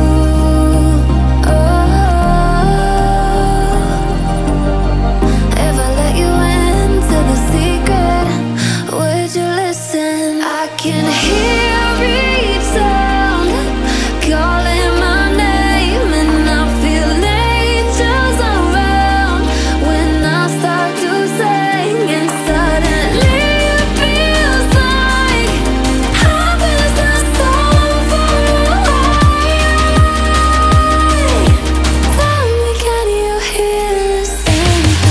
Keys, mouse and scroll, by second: 0.1 click, 4.1-5.6 alt+scroll up 2, 5.8 click, 10.4 alt+scroll down 1, 10.9 click, 11.3 alt+scroll up 1, 12.2 click, 15.0-19.4 drag, 19.9-21.6 drag, 21.6-25.3 drag, 25.3 alt+scroll up 1, 25.8-30.6 drag, 30.7-34.6 drag.